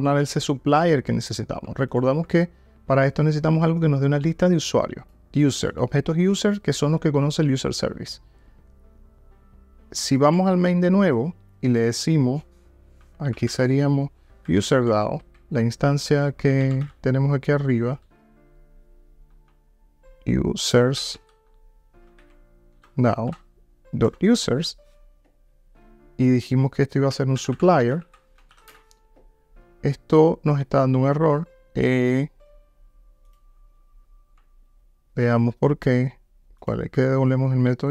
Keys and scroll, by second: 37.0 super+b.